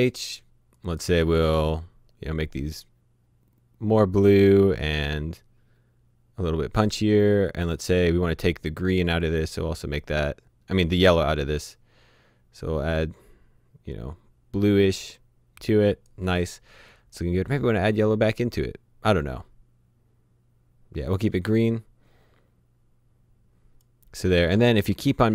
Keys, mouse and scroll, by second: 0.7 click, 5.2-7.3 scroll down 1, 7.6 click, 18.4 click.